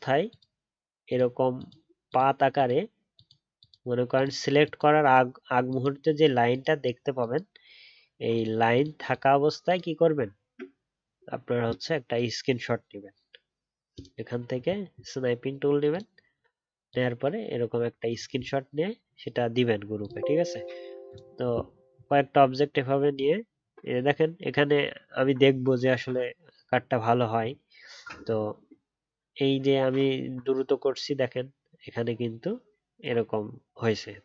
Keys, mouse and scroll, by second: 10.2-10.6 alt+scroll up 3, 22.0-22.8 alt+scroll down 1, 22.8 alt+scroll up 1, 27.9 alt+scroll up 4.